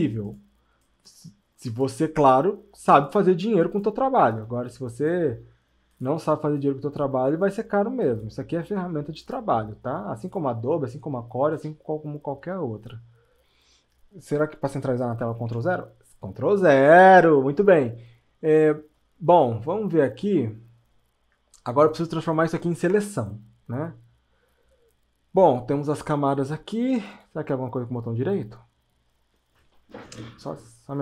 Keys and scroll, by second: 4.5 space.